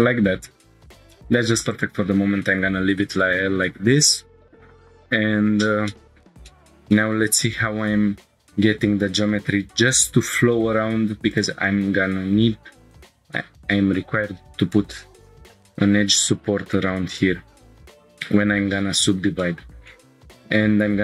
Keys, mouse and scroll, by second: 0.8 Tab, 1.7 click, 2.5 Tab, 5.3 scroll down 2, 5.9-6.2 shift+middle drag, 6.4 scroll down 1, 6.5 middle click, 6.9 shift+middle click, 7.4 scroll down 1, 9.1 scroll down 1, 9.8 ctrl+r, 18.2 right click, 18.8 ctrl+z, 19.4 shift+middle click, 19.9 click, 20.7 ctrl+r.